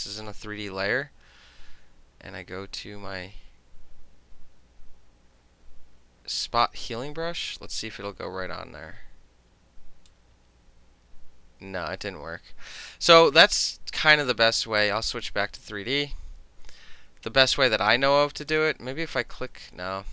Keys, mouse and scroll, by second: 6.5 click, 7.9-10.2 drag, 10.2-11.9 middle drag, 12.1 ctrl+z, 14.9 click, 15.7 click, 18.6 click.